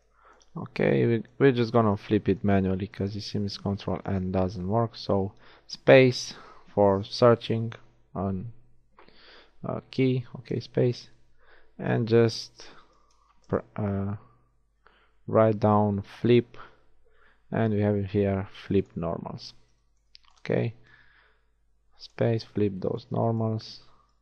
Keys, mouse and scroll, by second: 4.8 space, 10.7 space, 21.2 shift+space.